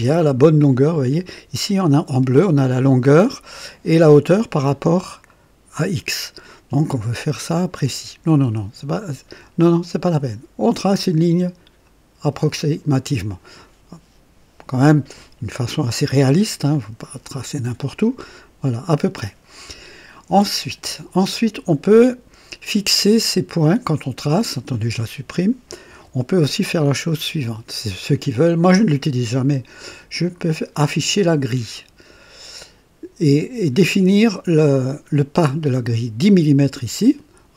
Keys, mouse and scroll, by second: 0.5-11.8 drag, 15.9-16.4 scroll down 2, 25.2 click, 25.8 Delete, 25.9 Delete, 27.0 click, 27.4 Delete, 30.0 click.